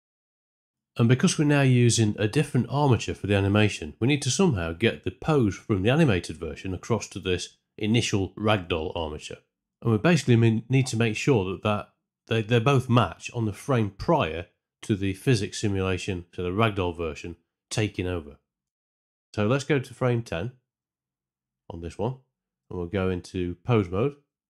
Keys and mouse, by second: 0.4 z, 0.7 shift+Left, 0.9 space, 1.7 space, 2.0 shift+Left, 20.6 Up, 22.5 Tab.